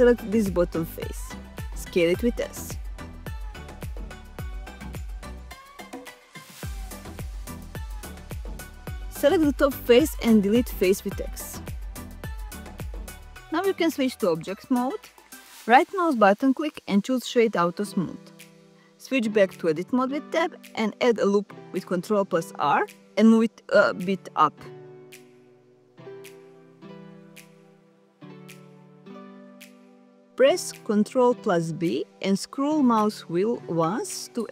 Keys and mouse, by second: 1.0 s, 10.1 click, 10.9 x, 15.8 Tab, 17.1 right click, 19.8 Tab, 20.5 middle click, 21.5 ctrl+r, 22.7 click, 30.3 ctrl+b.